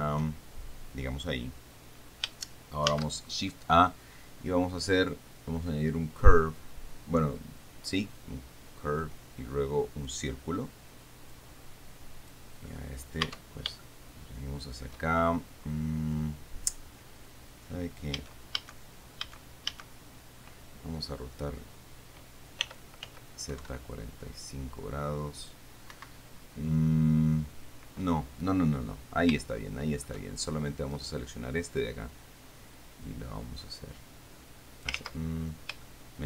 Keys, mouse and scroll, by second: 0.0 shift+click, 3.2 shift+a, 10.3 click, 11.6-12.8 drag, 13.6 Tab, 14.1-15.3 shift+drag, 18.4 a, 19.6 a, 22.9 r, 23.3 z, 23.8 KP_4, 23.9 KP_5, 26.2 Escape, 29.8 shift+click, 31.2 right click, 32.1-35.3 drag, 35.2 ctrl+z, 35.8 scroll down 3, 36.1 shift+click.